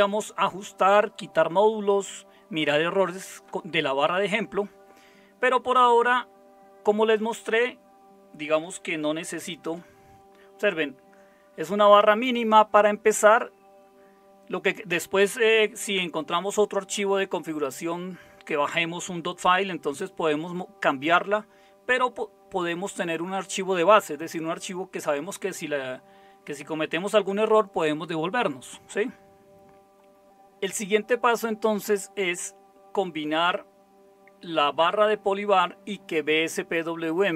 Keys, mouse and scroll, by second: 9.2 super+0, 30.2 super+7.